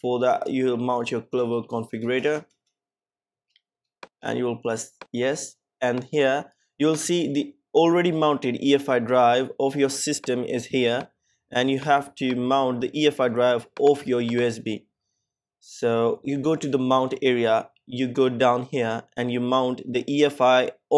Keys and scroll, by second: 1.8 Return.